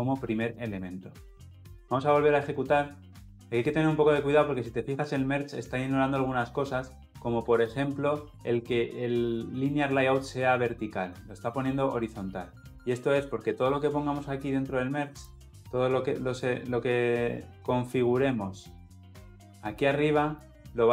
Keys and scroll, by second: 1.7 shift+F10.